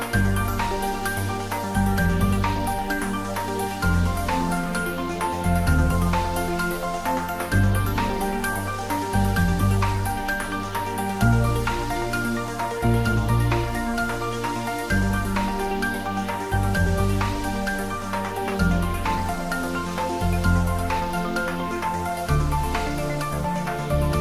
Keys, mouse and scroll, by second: 1.3-1.8 scroll down 1, 1.8-6.3 middle drag, 6.6 click, 9.8 ctrl+s, 12.6 ctrl+s, 13.2 ctrl+s, 19.3 scroll down 1, 21.3 middle click, 22.4-24.2 scroll down 1.